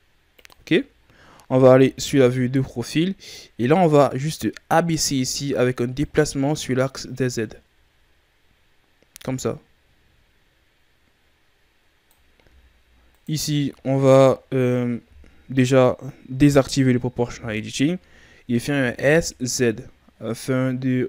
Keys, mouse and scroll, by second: 0.6-1.6 shift+scroll down 3, 1.6 KP_3, 3.1 right click, 4.3-5.6 scroll up 1, 5.9 click, 13.0 alt+right click, 13.8-16.3 shift+scroll up 4, 17.1 o, 18.6 s.